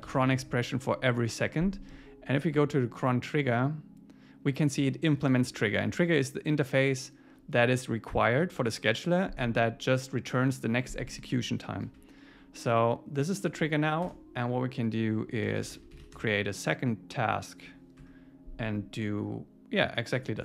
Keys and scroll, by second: 0.1 super+s, 14.1 Return, 18.0 Tab.